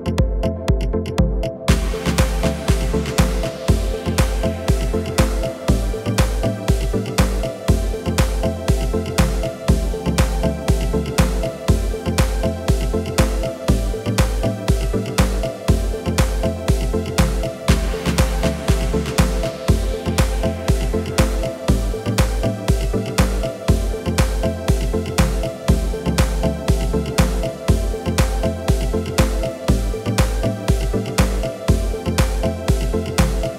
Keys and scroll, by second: 6.3 Tab, 9.9 g, 15.4 Tab, 22.2 KP_7.